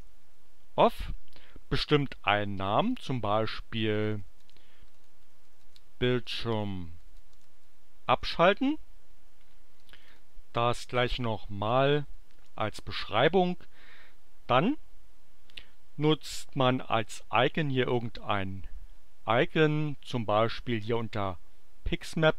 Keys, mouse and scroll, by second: 0.0-0.6 typing, 2.8 click, 3.6-8.9 typing, 9.7 click, 10.8 ctrl+c, 11.7 click, 12.3 ctrl+v, 17.8 click, 20.8 click.